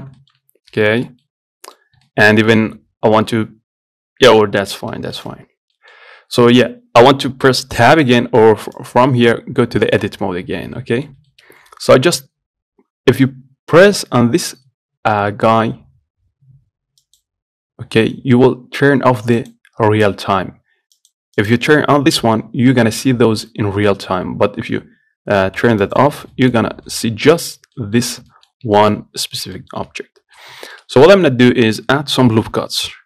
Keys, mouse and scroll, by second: 0.1 scroll up 1, 0.4-2.1 shift+middle drag, 2.1 scroll up 1, 2.3-5.8 shift+middle drag, 5.8 scroll down 1, 6.0-9.0 middle drag, 9.0-11.0 drag, 11.0-17.3 middle drag, 17.3 click, 19.6 click, 21.2 click, 21.7-23.5 drag, 23.5-26.1 middle drag, 26.1 click, 26.6 middle click, 26.8 scroll up 1, 27.1 middle click, 27.8 scroll down 1, 28.0 middle click, 28.7 scroll up 2, 29.0 shift+middle click, 29.2-29.8 scroll down 1, 29.8 middle click, 30.1-30.5 scroll up 1, 30.5-30.9 scroll down 1, 30.9 shift+middle click, 31.8-33.0 scroll down 1.